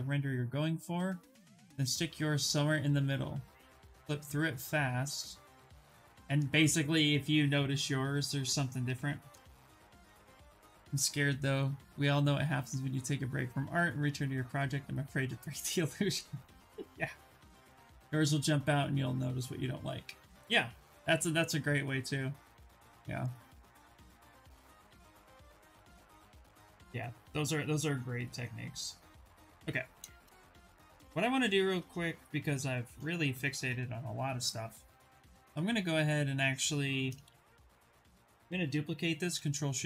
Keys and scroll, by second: 32.7 shift+f, 33.1 shift+f, 37.0 shift+f, 38.9 ctrl+shift+d.